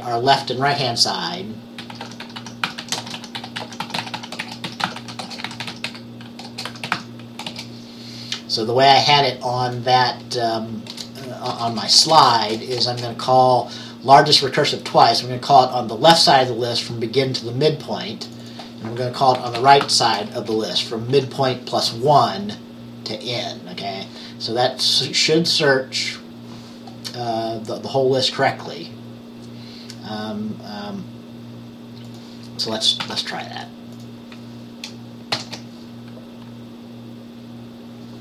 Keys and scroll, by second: 1.8-7.6 typing, 11.0 Return, 11.6-12.1 typing, 19.2-21.2 typing, 33.1 ctrl+s, 35.4 ctrl+b.